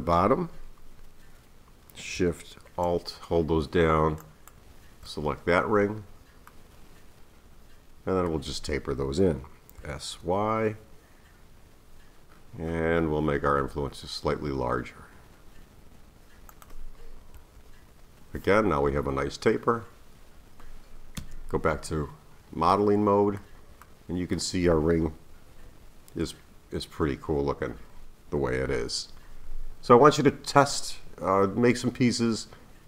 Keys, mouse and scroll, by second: 4.2 alt+shift+click, 6.0-6.5 scroll down 2, 6.5-9.5 middle drag, 9.8 s, 17.3 KP_3, 21.2 Tab, 22.7-26.9 middle drag.